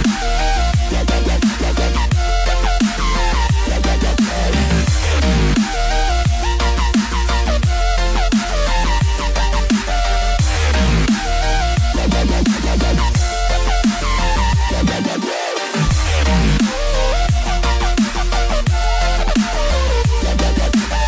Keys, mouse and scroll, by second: 10.1 click, 10.1 s, 16.3 scroll up 3, 17.0-18.3 scroll up 1, 18.6 shift+middle click, 19.5 click.